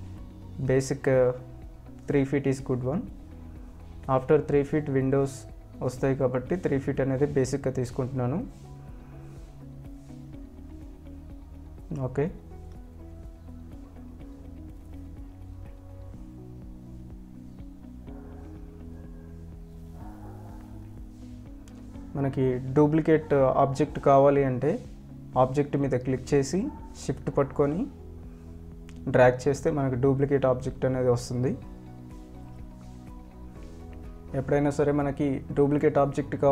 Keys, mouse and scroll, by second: 2.8 click, 3.8 shift+w, 4.2 a, 6.5 l, 6.7 l, 9.9-11.5 drag, 11.8 ctrl+alt+click, 12.5-13.6 scroll down 1, 13.6 t, 13.8 ctrl+alt+click, 14.2 scroll up 1, 15.4 scroll down 1, 16.1 click, 19.5 ctrl+alt+click, 21.6 click, 23.7 ctrl+alt+click, 28.0 shift+click, 31.3 scroll down 1, 31.5 scroll up 1, 32.0 ctrl+alt+click, 35.3 shift+click.